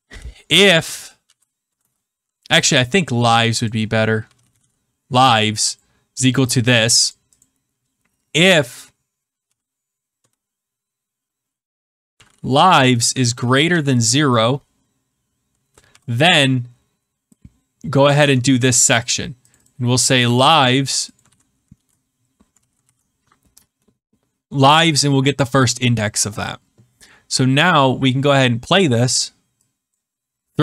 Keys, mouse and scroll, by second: 0.0-1.7 typing, 3.4 click, 3.6 click, 4.0-5.1 typing, 5.8 click, 7.0 click, 7.3 click, 9.4-10.1 typing, 11.6-13.6 typing, 15.8 typing, 18.0 click, 18.2 Tab, 19.0 click, 19.4 click, 20.2 ctrl+c, 21.1 click, 21.2 ctrl+v, 21.7 ctrl+d, 22.5 ctrl+z, 27.7 click, 29.9 click.